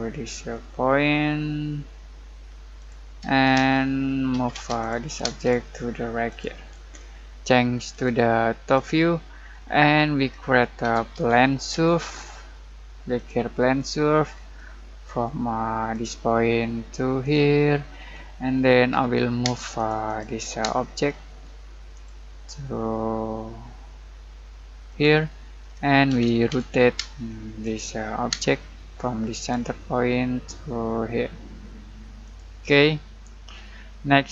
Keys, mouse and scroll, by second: 2.7 click, 3.5 space, 4.3 m, 4.5 space, 4.8 click, 5.2 space, 5.3 click, 9.4 scroll down 1, 9.9 middle click, 10.8-11.7 typing, 13.1 click, 14.3 scroll down 1, 14.5-15.9 middle drag, 15.9 click, 17.6 middle click, 17.9-18.9 scroll up 1, 18.9 m, 19.4 space, 19.7 click, 20.6 space, 20.8 scroll down 1, 21.0 middle click, 21.9 click, 24.8 click, 25.6-26.0 scroll up 1, 26.0-27.0 typing, 27.6 click, 28.3 space, 29.3 click, 32.2 click, 32.7-34.3 middle drag.